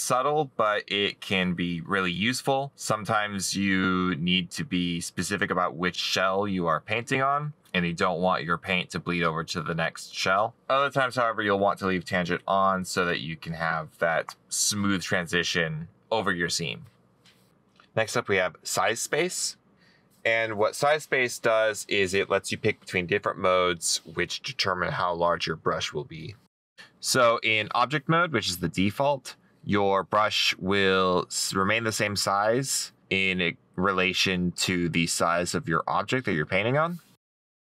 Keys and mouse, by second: 34.4 middle click, 35.0 middle click, 36.5 right click.